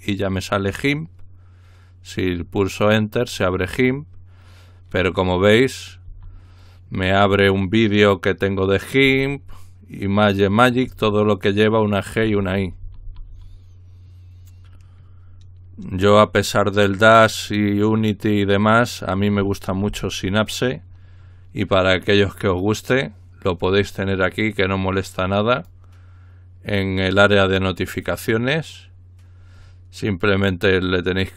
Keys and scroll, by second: 6.2 Down, 9.1 Down, 10.9 typing, 12.2-13.3 typing.